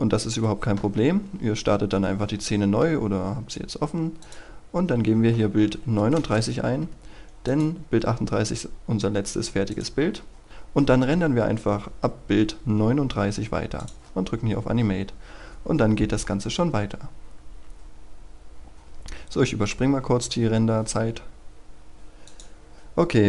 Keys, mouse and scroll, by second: 4.8 KP_3, 6.1 Return, 7.4 click, 22.0 F9, 22.2 click.